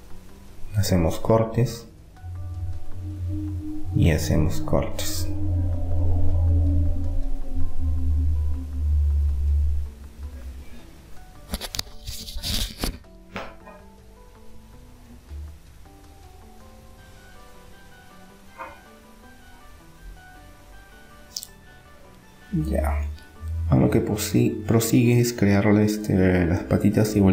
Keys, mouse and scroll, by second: 5.4 ctrl+r, 8.7-12.0 middle drag, 13.2 Tab, 13.4 middle click, 17.5-20.4 middle drag, 20.7-22.6 middle drag.